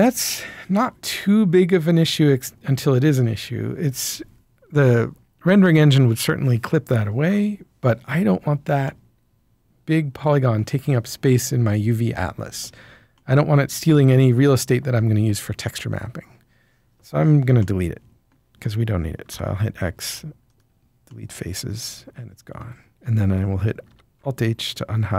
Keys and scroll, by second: 19.3 x, 23.8 alt+h.